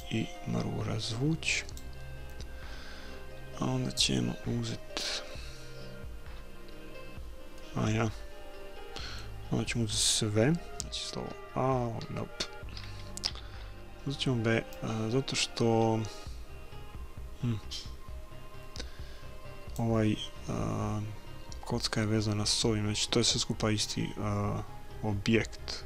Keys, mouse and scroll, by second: 0.0-2.0 drag, 7.5-9.6 middle drag, 10.8 a, 11.2 a, 12.0 a, 13.3 b.